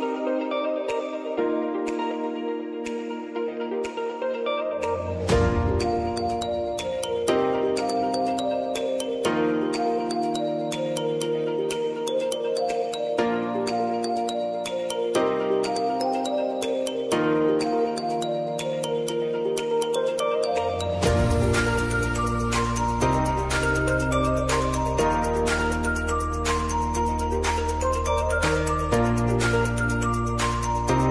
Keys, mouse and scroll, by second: 0.6 ctrl+d, 1.2 v, 1.7-3.6 drag, 3.6 ctrl+t, 4.0 click, 4.2 ctrl+a, 5.0-7.1 typing, 8.8-11.8 typing, 12.5 ctrl+a, 13.5 click, 15.0 Return, 15.8 click, 18.2-22.5 drag, 24.4 Return, 25.0 click, 26.1 Return, 28.2 click, 28.7 space, 29.8 click, 30.3 space.